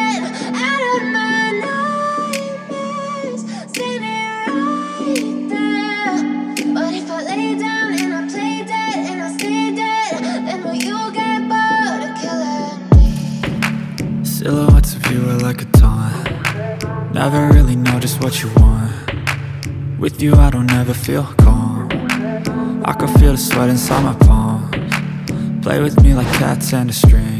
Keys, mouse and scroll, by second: 0.7 ctrl+o, 1.5-2.2 scroll down 1, 2.5-2.9 scroll down 1, 3.3-3.7 scroll down 1, 4.1 scroll down 1, 4.3 scroll up 1, 4.7 click, 5.3 click, 7.4 click, 8.2 ctrl+o, 8.9 scroll down 1, 10.2 scroll down 1, 10.9 scroll down 1, 12.0 scroll down 1, 12.4 click, 13.0 click, 15.1 F4, 15.2 click, 17.0 ctrl+o, 17.9-18.4 scroll down 1, 19.2-19.7 scroll down 1, 20.6-21.0 scroll down 1, 22.9 click, 25.6 F4.